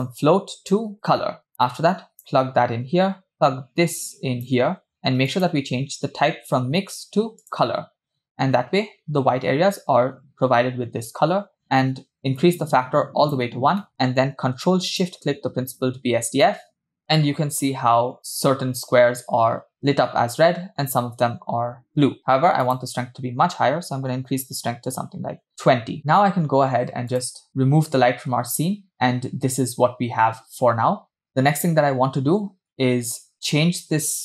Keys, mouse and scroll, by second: 1.5 click, 3.7-4.8 drag, 5.6-7.9 drag, 12.4-13.5 drag, 15.2 ctrl+shift+click, 22.6-25.5 drag, 27.3 click, 28.3 click, 28.6 space, 33.2 space.